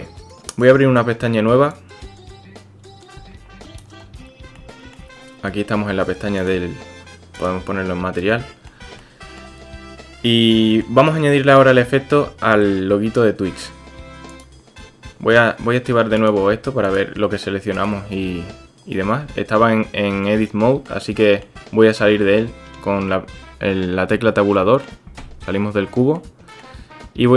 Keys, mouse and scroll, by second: 2.3-3.9 drag, 4.6-4.9 shift+drag, 6.4 click, 8.3 click, 9.1 shift+click, 10.7 click, 11.0 shift+drag, 11.4-11.9 drag, 16.9 click, 18.3 Tab, 19.3 Tab, 20.2-20.9 drag, 21.3 click, 24.6 click, 25.2 Tab, 26.3-26.7 drag.